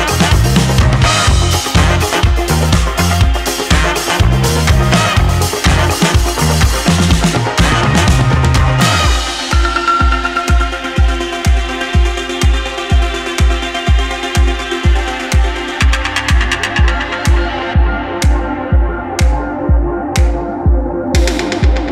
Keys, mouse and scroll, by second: 0.3 shift+drag, 0.7-1.1 middle drag, 2.0 middle drag, 2.4 shift+middle drag, 3.8-4.2 middle drag, 4.8 shift+middle drag, 6.1-6.5 middle drag, 7.2 shift+middle drag, 7.6-8.0 middle drag, 8.6 shift+middle click, 11.6-12.0 drag, 12.7-15.3 drag, 17.9 alt+r, 20.4-21.0 middle drag, 21.4 shift+middle drag.